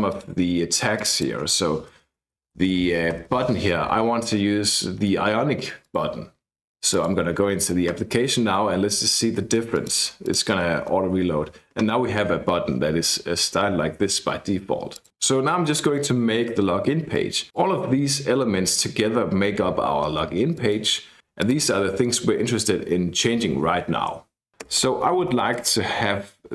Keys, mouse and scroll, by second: 0.1 click, 1.0 click, 2.0-3.2 typing, 5.8 click, 6.9 click, 9.8 click, 15.0 click, 17.1 click, 18.3 click, 20.5 click, 21.4 click, 23.9-24.5 scroll down 2, 24.6 Return, 24.8 Return, 25.2 Up.